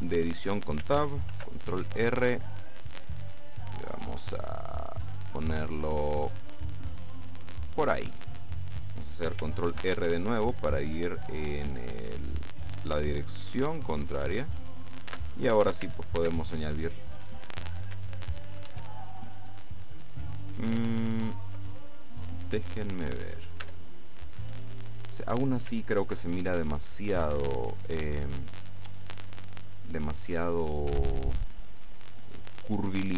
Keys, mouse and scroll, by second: 1.4 ctrl+r, 2.4 click, 7.7 click, 9.7 ctrl+r, 10.7 click, 14.5 click, 15.1 Tab, 16.2 ctrl+2, 18.8 ctrl+1, 23.7 Tab, 27.9 click, 31.0 Tab.